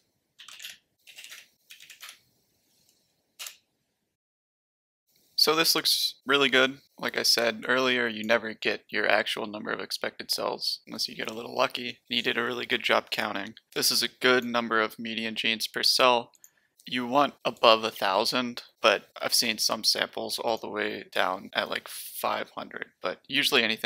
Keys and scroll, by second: 0.0-2.5 typing.